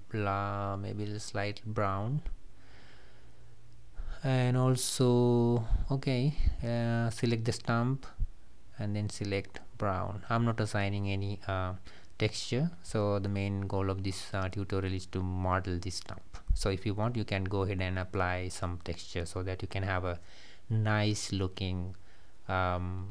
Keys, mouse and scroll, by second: 3.3 click, 5.0 click, 5.2 click, 5.7-7.6 middle drag, 7.6-8.1 scroll up 1, 8.1 click, 9.5-10.5 drag.